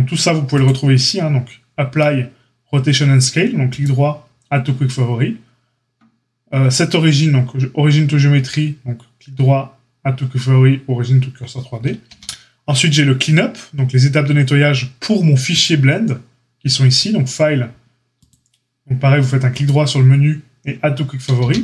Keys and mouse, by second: 12.1 q, 21.4 q.